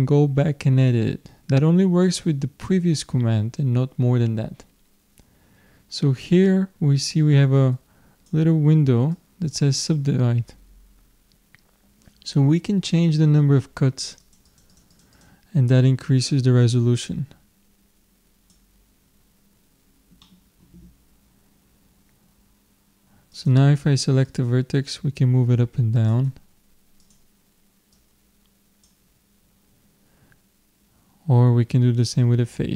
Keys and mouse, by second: 7.8-10.9 drag, 14.2-17.5 drag, 20.3-23.3 middle drag, 23.3-26.2 drag, 27.0-29.7 drag, 32.0-32.7 drag.